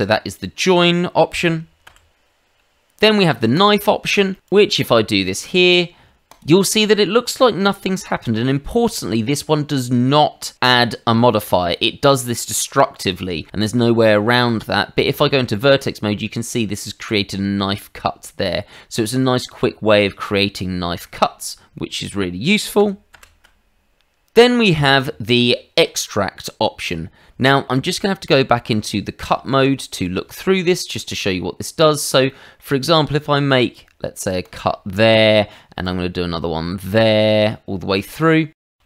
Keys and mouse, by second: 1.8 ctrl+z, 3.5 click, 4.3 middle click, 4.4 click, 6.3 click, 13.0 middle click, 14.4 Tab, 19.2 middle click, 22.8 ctrl+z, 23.1 ctrl+z, 27.9 click, 29.2 click, 29.9 Escape, 30.7 shift+middle click, 31.1 middle click, 32.3 middle click, 32.8 click, 34.4 click, 34.9 middle click, 35.8 click, 38.0 click, 38.6 middle click, 38.7 shift+middle click.